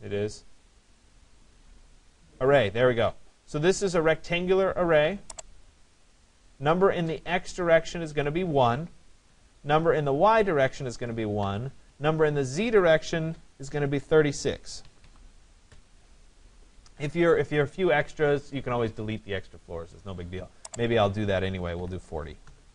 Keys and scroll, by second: 9.2 Return, 15.7 Return, 22.0 0.